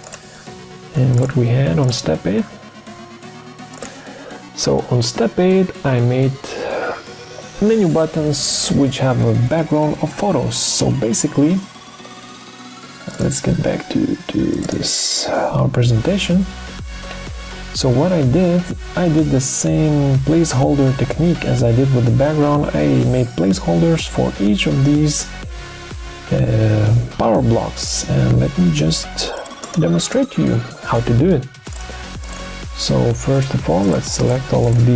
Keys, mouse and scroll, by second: 33.8 shift+click, 34.3 shift+click, 34.4 shift+double click, 34.6 shift+click.